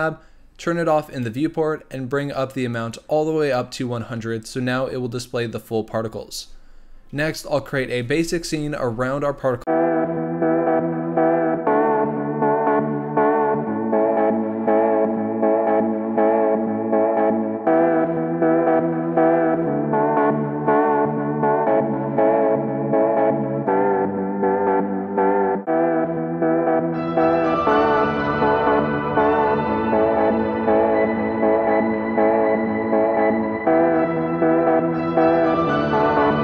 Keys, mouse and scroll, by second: 1.2-11.3 drag, 11.3-12.8 typing, 11.6 scroll down 1, 13.0-13.4 scroll up 7, 13.4 click, 13.5 scroll down 2, 13.7 drag, 14.5 click, 14.6 scroll up 2, 14.7 shift+middle click, 14.8 g, 15.4-15.9 scroll down 8, 15.7 middle click, 15.9-16.5 scroll up 3, 16.1 click, 16.5-17.0 shift+middle drag, 17.0 click, 17.4-19.7 typing, 17.8 click, 17.9 scroll up 5, 18.0 shift+middle click, 18.6-19.1 scroll down 14, 18.8 middle click, 19.2 click, 19.3 Tab, 19.4 click, 19.5 shift+click, 19.6 scroll up 1, 20.0 middle click, 20.2 click, 20.4 shift+click, 20.6 ctrl+b, 21.4 Tab, 21.6 click, 21.7-22.0 scroll up 2, 22.0 click, 22.1 click, 22.3 click, 22.5 click, 23.0-28.9 typing, 23.9 middle click, 24.0 scroll up 3, 24.3 ctrl+alt+KP_0, 24.6 click, 26.4 scroll up 2, 27.3 scroll down 2, 27.6 scroll up 1, 28.0 scroll down 1, 28.3 scroll up 1, 28.7 scroll down 1, 29.5 click, 30.0-30.4 scroll up 1, 30.4 click, 30.7 click, 31.0 z, 31.3 click, 31.8 click, 32.5 click, 32.7-33.8 drag, 35.6 scroll down 2, 35.8 click.